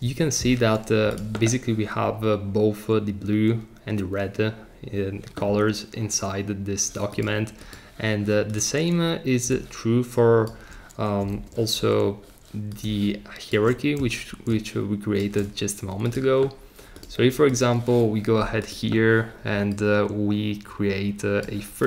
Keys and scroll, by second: 0.0 Return, 11.3 super+z.